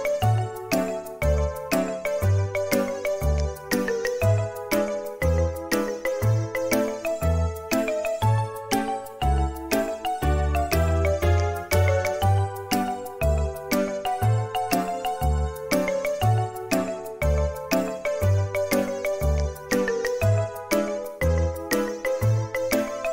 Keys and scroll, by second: 3.5 typing, 11.2 space, 12.0 Escape.